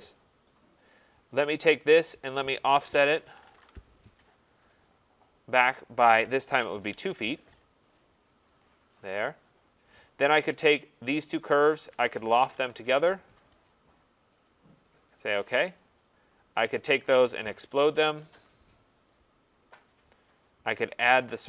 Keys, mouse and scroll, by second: 0.2 click, 1.8 click, 2.7-4.0 typing, 6.2-7.1 typing, 8.0 click, 9.9 click, 10.9 click, 11.6 shift+click, 12.3-13.2 typing, 14.4 click, 15.9 click, 16.6 click, 16.6-18.3 typing, 19.8 click, 20.3 scroll.